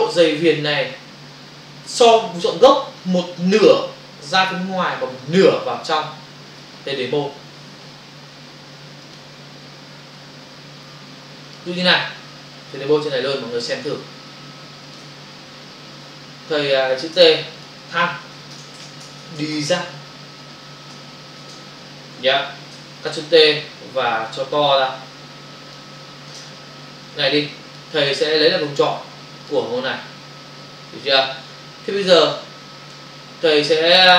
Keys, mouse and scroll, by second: 9.0 click, 11.5 click, 13.1 f, 15.0 shift+click, 16.1 Delete, 17.1 t, 17.6 click, 18.3 t, 19.4-21.5 typing, 22.0 Return, 22.7 v, 26.4 Return, 27.0 click, 29.4 ctrl+click, 31.1 space, 31.2 ctrl+click.